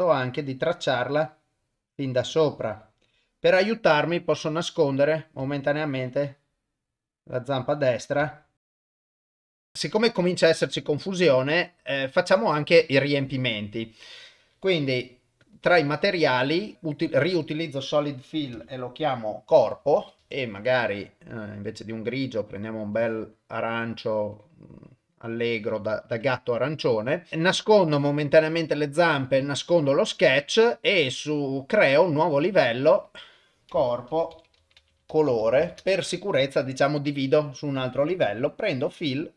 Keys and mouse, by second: 4.7 click, 5.8-7.8 shift+drag, 8.6 shift+click, 8.9 shift+click, 16.4 click, 17.1-20.2 drag, 21.3 click, 27.9 click, 28.0 click, 29.4 click, 31.0 click, 32.2 click, 33.0-35.8 drag, 38.5 click, 39.2-39.3 drag.